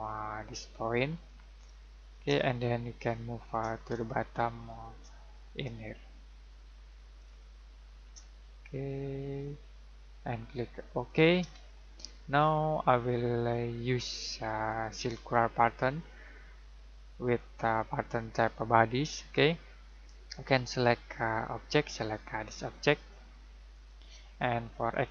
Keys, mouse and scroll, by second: 1.7 middle click, 2.5 middle click, 4.0 shift+middle click, 7.4 middle click, 9.4 click, 11.6 shift+middle click, 13.3 click, 23.7 click.